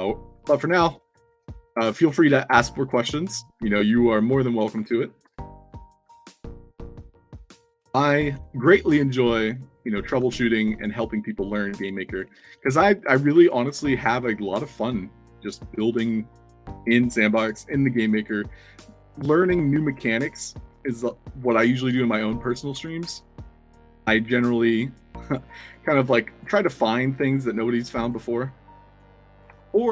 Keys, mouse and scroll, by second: 0.3 alt+click, 0.9-1.9 typing, 1.0 middle click, 3.8 click, 7.3 i, 8.3-10.0 typing, 10.4 shift+click, 11.2 scroll up 2, 11.5 scroll down 2, 11.9 alt+click, 12.1-13.0 typing, 13.2 ctrl+d, 13.9-15.7 shift+drag, 15.8 f, 17.0 o, 18.8 shift+click, 20.3 i, 21.4-22.1 shift+drag, 22.4-23.7 typing, 24.2 shift+click, 25.6-26.3 alt+drag, 27.3-28.0 drag, 28.8 click, 29.6-29.9 alt+drag.